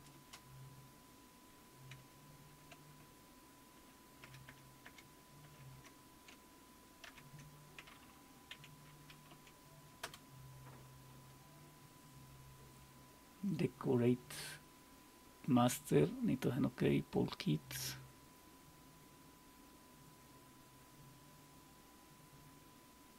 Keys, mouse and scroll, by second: 0.1 space, 3.8 ctrl+-, 4.2 ctrl+-, 4.5 ctrl+-, 4.8 ctrl+-, 5.4-7.1 ctrl+-, 8.5 q, 9.3 Up, 10.0 Return.